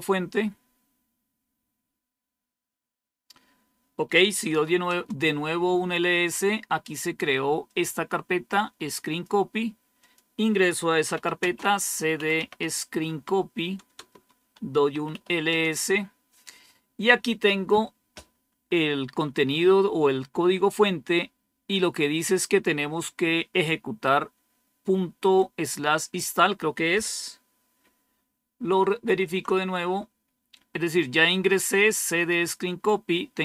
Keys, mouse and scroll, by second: 0.7-1.4 typing, 4.2-5.1 typing, 7.6-9.2 drag, 9.9 click, 10.5 click, 10.7-13.0 typing, 13.0 Tab, 13.9 Return, 14.6-16.0 typing, 28.9 super+3, 31.6-32.8 drag.